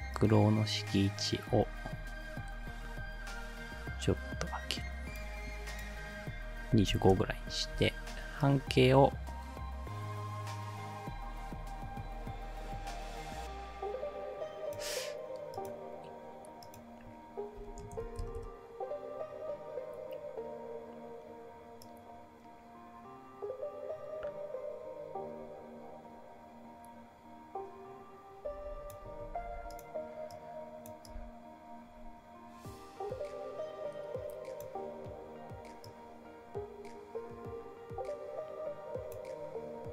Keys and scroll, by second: 6.5-7.5 typing, 17.3-18.5 typing.